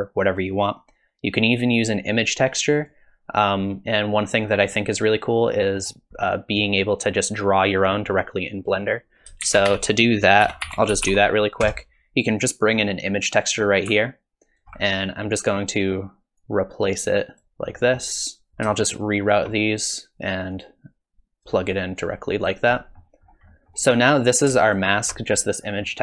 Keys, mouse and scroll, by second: 1.5 click, 2.4 click, 4.0-4.8 scroll down 1, 5.6 middle click, 6.2 middle click, 8.8 click, 9.4 shift+a, 14.0 alt+click, 15.0 click, 16.4 click, 17.7 middle click, 18.5 ctrl+z, 18.5 shift+right click, 18.8 shift+right click, 20.5 click, 22.0 click, 22.8 middle click, 23.2 scroll up 2, 23.5 middle click, 23.8 scroll down 1, 24.7 ctrl+shift+click, 25.6-26.0 scroll up 2, 25.9 middle click.